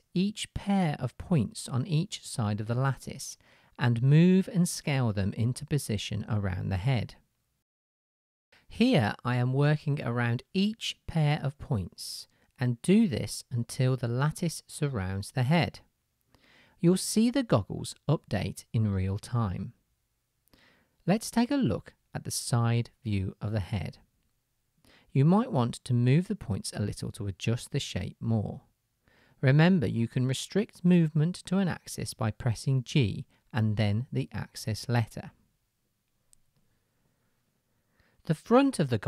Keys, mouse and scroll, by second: 1.1 shift+middle click, 1.4-4.6 drag, 3.0 g, 4.6-7.0 shift+middle drag, 4.9 s, 7.0 click, 7.3 middle click, 7.6-10.2 drag, 9.2 g, 10.2-12.9 middle drag, 10.7 s, 12.9-16.0 drag, 14.4 g, 16.0-20.6 middle drag, 16.3 s, 20.1 Tab, 20.6-31.6 drag, 23.2 KP_Decimal, 26.5 Tab, 29.2 g, 31.6 shift+middle click, 32.4-36.7 drag, 34.0 g, 36.7-39.0 shift+middle drag, 37.7 Tab.